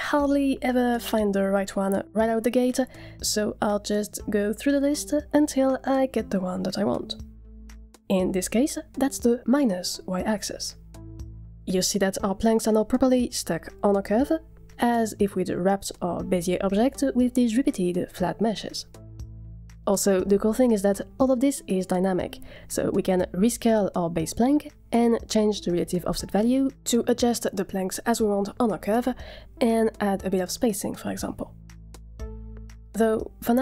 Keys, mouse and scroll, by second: 4.0-4.4 drag, 5.1-5.5 drag, 6.1-6.5 drag, 14.9-15.3 scroll up 1, 15.3-17.1 middle drag, 20.2-20.8 middle drag, 23.1 Tab, 23.3-24.6 typing, 24.7 Tab, 25.7-27.1 drag, 27.2 click, 29.2 click, 29.8-31.9 middle drag.